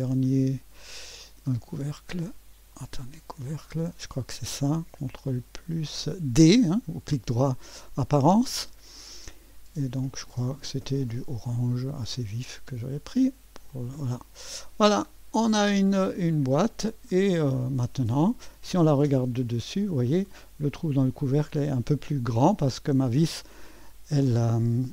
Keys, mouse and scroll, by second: 1.8 click, 2.9-4.0 drag, 4.2-6.8 drag, 7.4 ctrl+d, 9.0 click, 11.2 click, 12.1 drag, 13.0 click, 13.7 click, 15.4 click, 15.7 middle click, 16.1-16.9 drag, 16.4-17.0 scroll up 1, 17.0-17.7 scroll down 2, 17.4 middle click, 17.5 click, 17.7 middle click, 17.9-19.1 drag, 19.1 ctrl+d, 19.9 scroll up 1, 20.4 click, 21.0 scroll up 1, 21.8-22.8 drag.